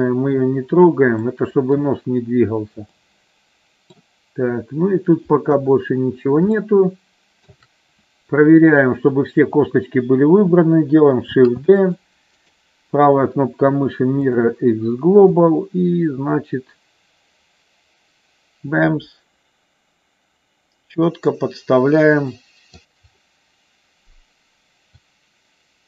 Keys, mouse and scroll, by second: 1.2 middle click, 2.8 middle click, 3.6 middle click, 5.5 KP_1, 6.5 shift+middle click, 11.3 shift+d, 11.8 click, 12.5-14.4 right drag, 15.4-22.8 drag, 24.9-25.8 drag.